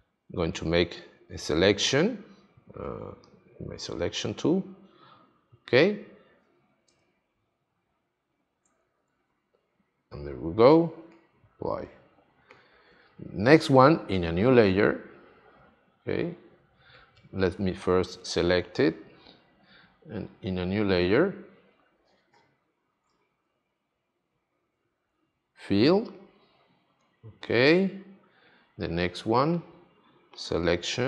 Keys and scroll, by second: 8.4 shift+F5, 24.5 shift+F5.